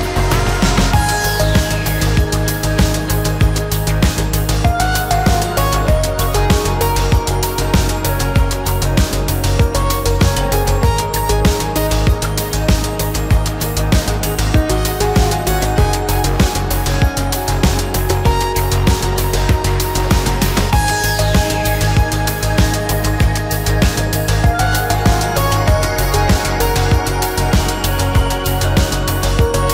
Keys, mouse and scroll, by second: 2.9 shift+v, 8.4 shift+middle click, 10.0 shift+middle click, 16.5 space, 25.5 shift+v, 28.1 shift+middle click, 28.4 space, 29.5 space.